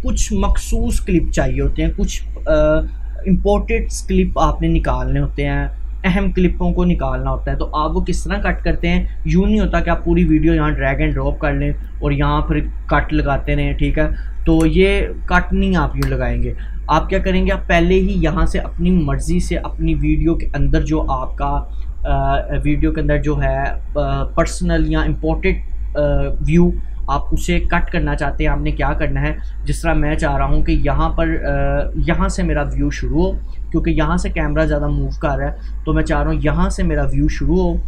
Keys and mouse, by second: 8.7 click, 9.8-14.3 drag, 14.5 ctrl+k, 15.5 click, 15.9 Delete, 17.3 click, 17.4 Delete, 19.1-29.1 drag.